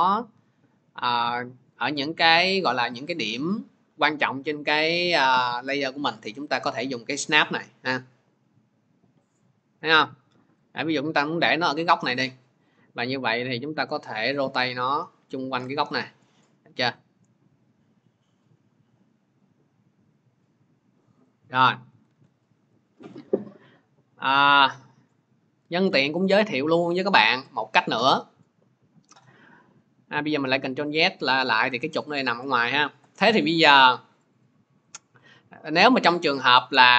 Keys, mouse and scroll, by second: 10.4-15.5 drag, 21.1 click, 22.0 ctrl+z, 25.6 ctrl+z, 27.4 click, 28.3 middle click, 30.1 click, 30.8 click, 34.2 click, 35.8 click, 36.8 click.